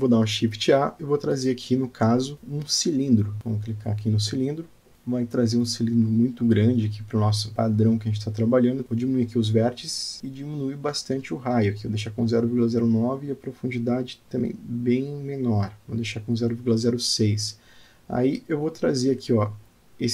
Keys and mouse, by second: 0.0 click, 1.2 shift+a, 7.7-8.2 middle drag, 10.0 click, 12.3-15.2 drag, 16.1-18.6 drag, 18.6 alt+middle click, 19.9 g.